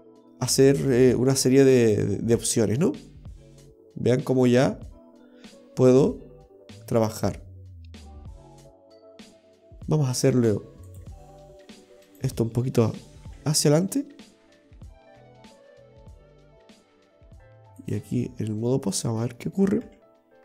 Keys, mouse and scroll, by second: 8.9 ctrl+z, 10.2 click, 12.2 right click, 13.3 g, 17.0 click, 19.0 right click, 19.9 g.